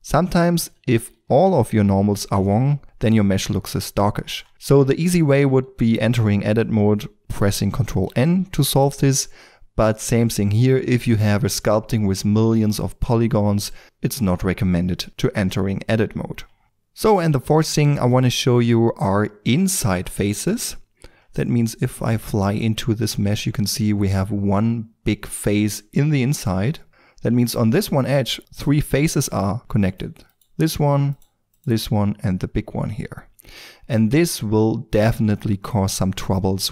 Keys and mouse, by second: 0.0 Tab, 0.6 a, 0.8 a, 1.1 a, 1.9 ctrl+shift+n, 2.3 Tab, 5.1 Tab, 8.0 ctrl+n, 9.0 Tab, 16.6-24.8 middle drag, 23.3 shift+f, 26.9 middle click, 27.4 middle click, 29.8-33.1 drag, 33.3 right click, 34.1-36.7 middle drag, 36.2 Tab.